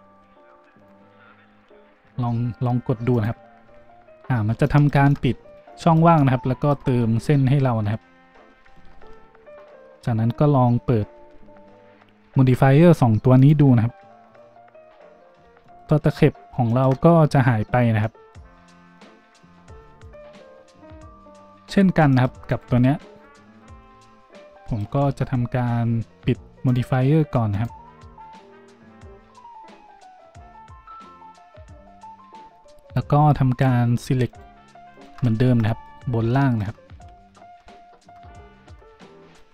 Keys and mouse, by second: 7.9-13.5 drag, 8.9 Tab, 13.5-14.3 middle drag, 14.3-15.4 drag, 15.4-22.5 shift+middle drag, 22.0 shift+a, 22.5 click, 22.6-26.6 middle drag, 25.1 Tab, 26.6 click, 26.7 middle click, 27.5 click, 27.6-33.5 middle drag, 28.9 z, 33.5 z, 34.2 alt+shift+click, 34.9 alt+shift+click, 35.2-36.2 middle drag, 35.2 z, 36.7 middle drag, 37.0 z.